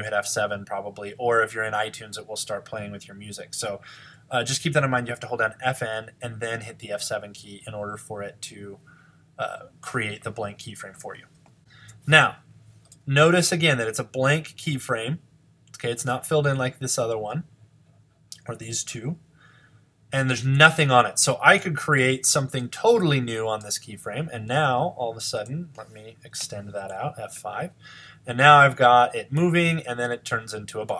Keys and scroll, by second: 25.5 F5.